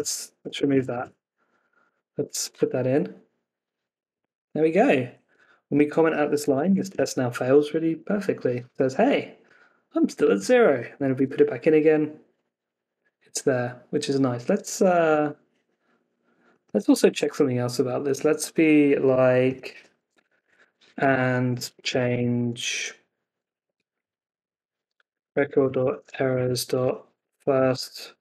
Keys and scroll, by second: 0.6 super+s, 0.9 super+Tab, 1.5 Down, 1.8 Up, 2.1 Return, 5.2 super+Tab, 6.6 super+s, 6.8 super+Tab, 7.9 Up, 11.1 Return, 14.5 super+Tab, 19.6 Escape, 23.9 Left.